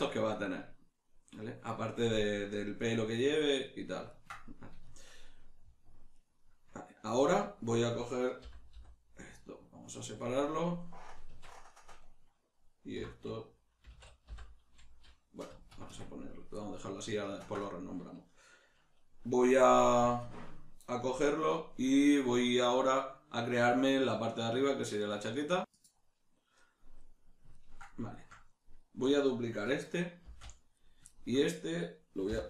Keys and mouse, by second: 6.1 right click, 7.2 Tab, 7.7 right click, 8.4 l, 11.6 right click, 12.9 F2, 17.3-30.9 ctrl+middle drag, 30.2 shift+d, 30.9 right click, 31.1-32.4 ctrl+middle drag, 32.3 h.